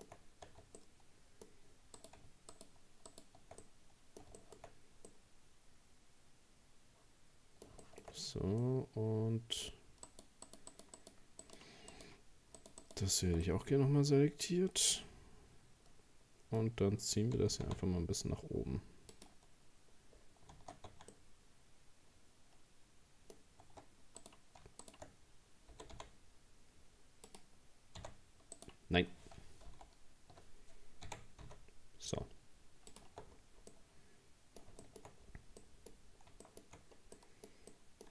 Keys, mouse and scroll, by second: 0.2-0.5 scroll up 1, 0.5 Tab, 0.8-2.0 middle drag, 2.0 right click, 2.5 shift+right click, 3.1 shift+right click, 3.6-4.6 middle drag, 4.6-5.1 shift+scroll up 2, 5.1-8.1 middle drag, 8.1-8.6 scroll up 1, 8.6-10.1 middle drag, 10.1 shift+right click, 10.5 shift+right click, 10.7 shift+right click, 11.0 shift+right click, 11.4 shift+right click, 11.9 shift+right click, 12.6 shift+right click, 12.8 shift+right click, 13.5-16.5 middle drag, 17.4 g, 19.8-20.5 scroll down 4, 20.9 Tab, 21.1-23.4 middle drag, 23.4 scroll up 1, 23.7 Tab, 24.2 right click, 24.8 shift+right click, 25.7 g, 28.1 e, 29.8 ctrl+z, 31.1 r, 33.1 Tab, 33.3-33.7 scroll down 3, 33.7-35.2 middle drag, 35.2 scroll down 3, 35.6 middle click, 36.0-37.2 scroll up 4, 36.4 shift+middle click, 37.2-38.1 middle drag.